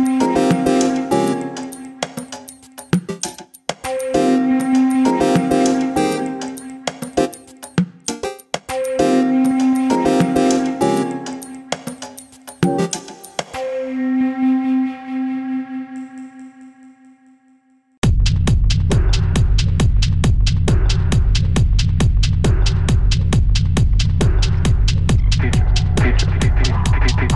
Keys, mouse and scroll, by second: 1.4-2.1 middle drag, 3.3 drag, 4.1 click, 4.9 scroll down 1, 5.1-6.4 middle drag, 6.4 click, 6.6-7.1 middle drag, 7.3 middle drag, 7.6 click, 7.6 middle drag, 7.9 scroll down 2, 8.1-8.6 middle drag, 8.6 shift+a, 12.9-14.2 scroll down 2, 14.2 r, 16.4 scroll down 1, 16.6-16.9 middle drag, 16.9-17.9 scroll up 2, 18.1 s, 20.8 middle click, 21.1-21.9 scroll up 2, 21.9 g, 23.1-23.5 scroll up 2, 23.5-23.9 shift+middle drag, 23.9-24.3 scroll up 1, 24.3-27.3 typing, 24.8-25.2 middle drag, 25.6-26.1 middle drag, 26.3 scroll down 1, 26.4 middle drag, 26.5 scroll up 1.